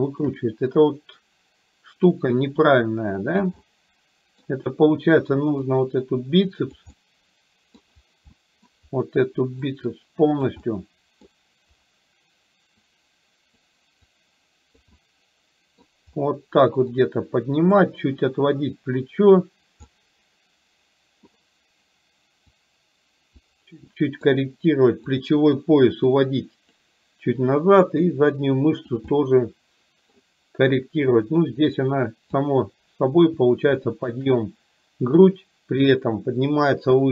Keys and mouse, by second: 0.1 shift+middle click, 2.2-3.6 drag, 3.7 middle click, 5.8-6.9 drag, 7.1 middle click, 8.4 middle click, 9.7 click, 10.7 middle click, 12.9 click, 14.2 click, 15.2 middle click, 17.1 click, 20.1-21.4 middle drag, 22.7 click, 24.1 middle click, 25.2 click, 26.2 click, 27.9-29.1 drag, 29.2-30.2 middle drag, 31.2-32.6 drag, 33.9 shift+middle click, 35.3-36.9 drag.